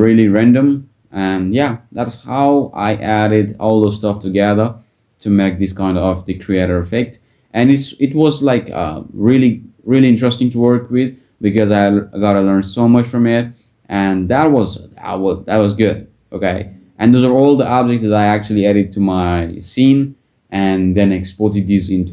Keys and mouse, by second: 0.7 click, 1.8 click, 5.1 click, 14.3 click, 17.0 middle click.